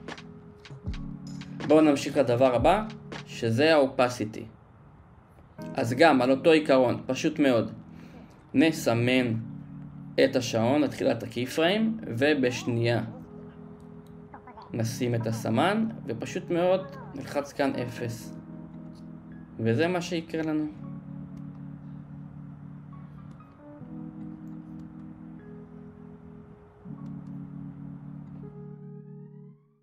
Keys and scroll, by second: 0.3 space, 2.3 BackSpace, 18.5 0, 18.8 Return, 22.3 space, 24.3 space, 25.8 space, 28.0 space.